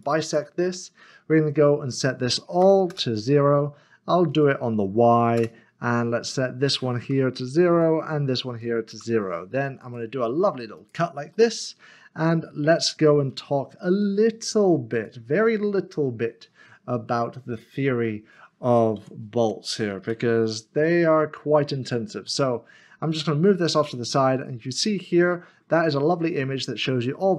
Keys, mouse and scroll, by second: 2.9 Return, 4.3 click, 5.3 Return, 6.3 click, 7.7 click, 8.9 Return, 9.8 click, 11.3 click, 11.7 middle click, 12.3 shift+middle click, 13.3 2, 14.0 middle click, 14.9 click, 15.5-16.2 scroll up 1, 17.2 shift+middle click, 19.0 Tab, 20.8 scroll up 1, 21.5-22.1 scroll up 1, 22.3 shift+middle click.